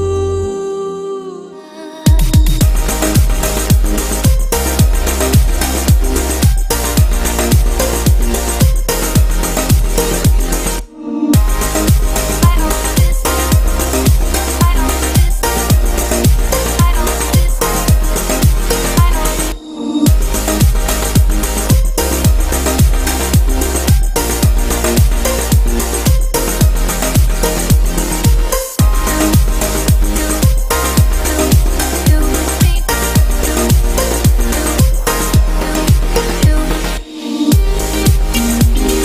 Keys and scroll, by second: 10.8 ctrl+j.